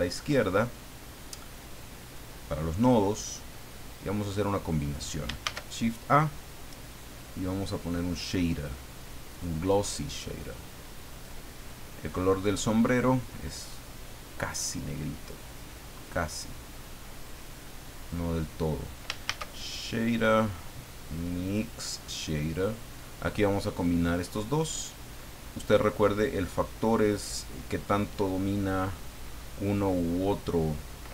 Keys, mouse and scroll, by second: 2.7 click, 4.2 click, 5.4 shift+a, 9.3 click, 11.1 click, 12.0 click, 13.8-18.3 drag, 19.2 shift+a, 21.4 click, 22.5 click, 23.6 click, 24.5 middle click, 25.4-25.9 scroll up 2, 25.9-28.5 middle drag.